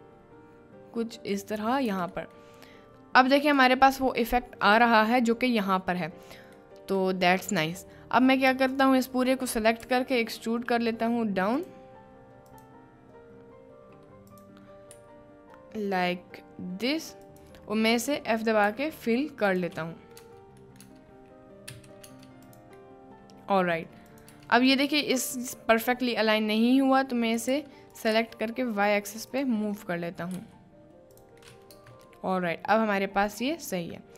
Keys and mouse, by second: 1.3 click, 1.9 Tab, 2.4 middle click, 3.5 click, 4.0 middle click, 6.5 middle click, 7.6 Tab, 9.4 middle click, 9.5 click, 9.8 e, 11.6 click, 12.4 click, 14.2 click, 15.0 g, 17.2 click, 18.0 middle click, 18.7 f, 19.5 click, 20.0 middle click, 20.2 Tab, 20.6 middle click, 21.0 Tab, 21.7 f, 22.7 Tab, 22.8-23.6 middle drag, 23.8 middle click, 24.2 click, 24.3 Tab, 24.5 click, 25.8 click, 27.4 g, 27.5 x, 28.1 g, 28.1 y, 29.3 click, 29.9 click, 30.3 g, 31.4 click, 31.8 Tab, 32.2-33.8 middle drag.